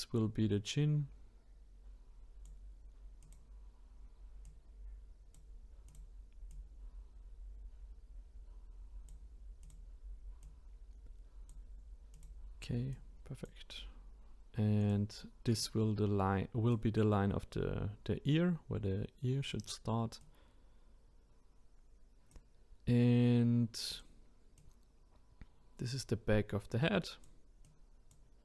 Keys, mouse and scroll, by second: 3.2 click, 4.4-9.5 drag, 9.6 click, 10.4 click, 12.1 click, 12.9 click, 14.8 click, 19.5 click, 20.2 click, 23.9 click, 24.6-27.6 drag.